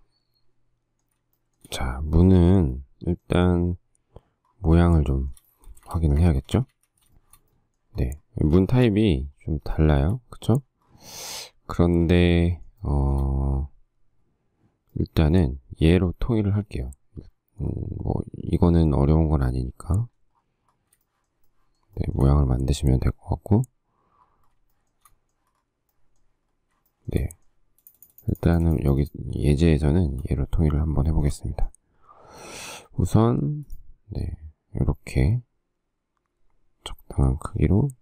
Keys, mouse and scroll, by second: 1.6 shift+scroll, 1.7 shift+middle click, 5.3 shift+middle click, 6.0 space, 6.2 Escape, 6.5 Escape, 7.4 shift+middle click, 8.8 shift+middle click, 11.5 shift+middle click, 12.5 shift+middle click, 13.0 shift+middle click, 21.3 shift+middle click, 21.7 shift+middle click, 25.0 shift+middle click, 27.1 shift+middle click, 31.3 shift+middle click, 31.4 shift+middle click, 33.4 f.